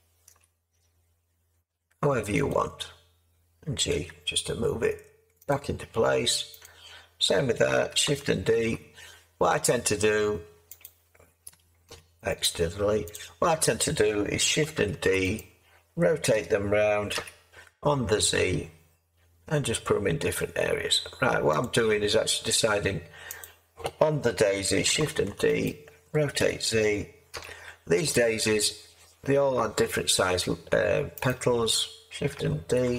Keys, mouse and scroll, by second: 0.3 s, 3.9 g, 8.5 shift+d, 11.9 x, 14.9 d, 16.3 r, 17.1 z, 25.1 shift+d, 26.4 r, 27.3 z, 32.8 d.